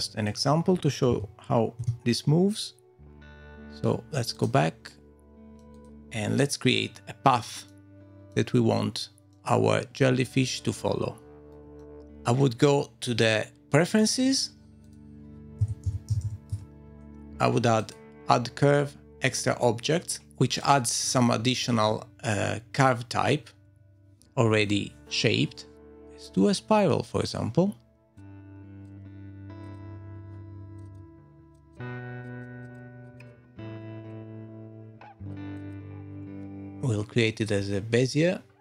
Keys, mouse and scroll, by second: 0.0-1.4 typing, 4.3 click, 4.9 middle click, 5.7 click, 6.1 scroll down 2, 7.6 middle click, 8.7-9.8 scroll up 5, 9.3 shift+middle click, 10.9-11.3 scroll down 2, 11.8 shift+middle click, 20.3 click, 21.0 click, 28.8 click, 29.6 click, 30.1 scroll up 4, 30.3-30.6 scroll down 2, 30.7 click, 30.8 click, 31.5 click, 31.9 scroll down 5, 32.2 click, 32.4 click, 32.5 click, 33.5 click, 33.5 scroll down 6, 33.6-34.0 scroll up 11, 34.1 click, 35.5 click, 35.7 click, 36.1 scroll down 1.